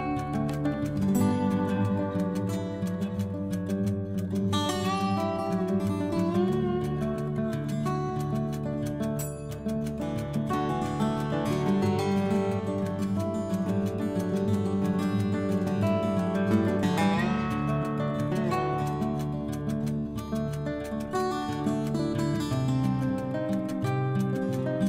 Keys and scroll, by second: 4.6 F12, 7.6 5, 14.1 Down, 14.8 Right.